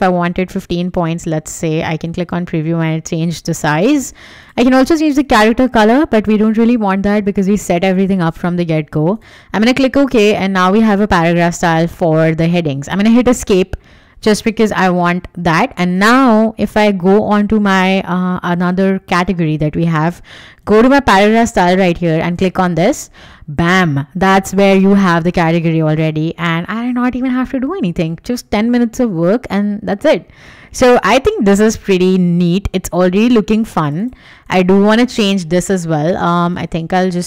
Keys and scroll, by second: 11.3 Escape, 25.9 w.